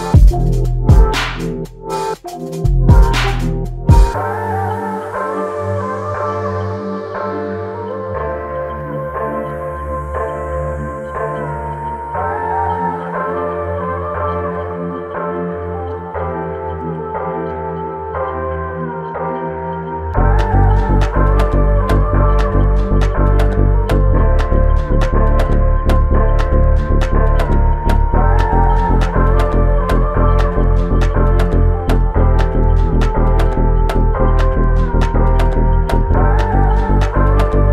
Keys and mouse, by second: 2.0 alt+click, 5.1 alt+click, 6.9 double click, 7.6 alt+click, 8.7 double click, 9.5 alt+click, 13.3 double click, 16.0 alt+click, 19.5 alt+click, 20.7 double click, 21.5 alt+click, 22.9 double click, 24.8 alt+click, 26.2 alt+shift+click, 31.2 typing, 32.5 alt+click, 37.2 alt+l, 37.3 ctrl+i.